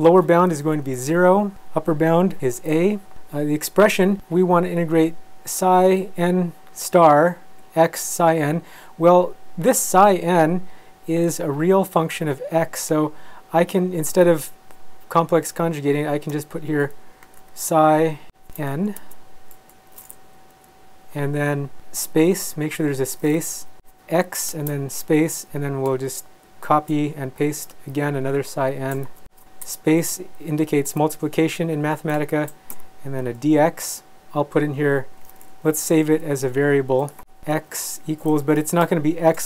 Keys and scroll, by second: 1.0 0, 2.4 a, 16.3 Escape, 17.2 p, 18.6 n, 19.0 space, 19.6 BackSpace, 20.2 Right, 22.3 space, 23.5 Left, 23.8 Left, 23.9 space, 25.2 Left, 25.5 Left, 26.1 shift+Left, 26.1 shift+Up, 26.5 shift+Right, 26.7 shift+Right, 27.4 Left, 28.5 shift+Left, 29.1 super+c, 29.4 Right, 29.6 BackSpace, 30.1 Right, 30.4 Left, 30.8 space, 31.4 Right, 31.6 Right, 32.3 shift+Left, 32.7 x, 35.1 =, 35.6 Left, 36.2 Right, 37.9 =, 38.4 Left, 39.1 shift+Left.